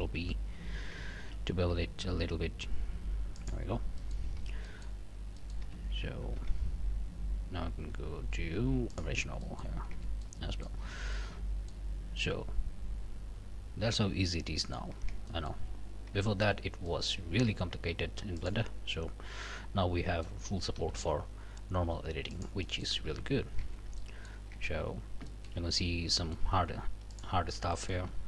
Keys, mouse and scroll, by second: 1.2 ctrl+b, 3.4 middle click, 3.7 scroll down 2, 4.0 alt+middle click, 4.4 alt+a, 4.6 alt+middle click, 5.4 click, 5.6 a, 6.4 q, 8.9 click, 9.4 click, 9.9 Tab, 10.2 click, 10.8 scroll up 2, 11.1 middle click, 11.8-12.1 scroll down 2, 12.2-14.9 middle drag, 15.0 Tab, 15.3 middle click, 15.7-16.3 scroll up 6, 16.3 shift+middle click, 16.6 shift+scroll down 2, 16.9 shift+middle click, 17.3 alt+a, 17.5 alt+scroll up 2, 18.4 alt+middle click, 19.4-20.4 middle drag, 20.8 g, 22.3 middle click, 23.1 a, 23.3 scroll down 1, 23.6 Tab, 24.0 scroll down 1, 24.0 middle click, 24.5 Tab, 24.8 scroll up 1, 25.3 shift+middle click, 25.6-26.0 shift+scroll up 1, 26.1 middle click, 27.1 alt+click, 27.7 alt+middle click.